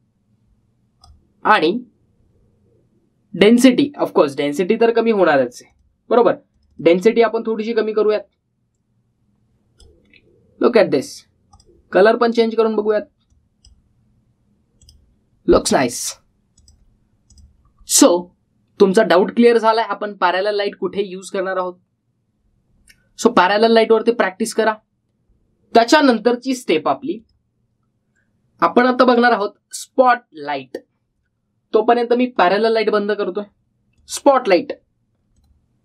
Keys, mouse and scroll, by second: 0.2-2.1 drag, 6.5-10.8 drag, 28.0 click, 33.2 click.